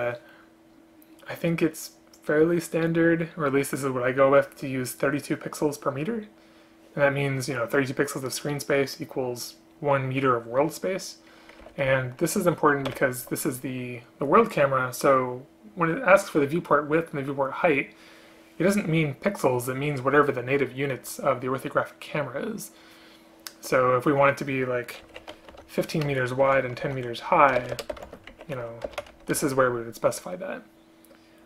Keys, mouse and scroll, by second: 11.7 End, 11.9 Left, 13.0 End, 13.2 Left, 14.1 ctrl+p, 26.2 space, 27.7 ctrl+BackSpace, 28.1 space, 29.0 BackSpace.